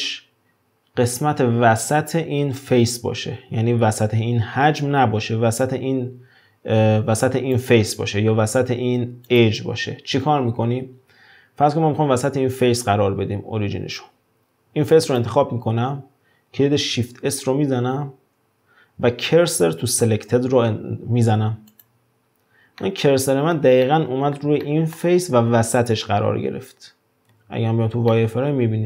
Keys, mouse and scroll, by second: 6.7 Tab, 7.3 3, 7.6 click, 8.9 2, 9.3 click, 15.1 click, 17.1 shift+s, 22.8-27.4 middle drag, 27.4 z, 28.1-28.8 middle drag.